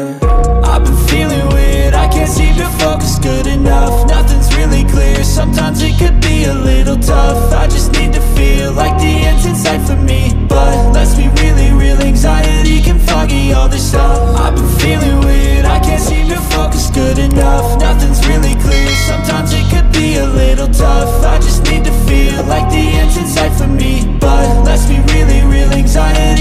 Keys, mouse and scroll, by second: 4.6 right click, 5.2 click, 6.7 click, 9.6 click, 11.9 shift+click, 15.7 click, 17.7 click, 19.5 click, 21.8 click, 24.2 click, 25.5 ctrl+click.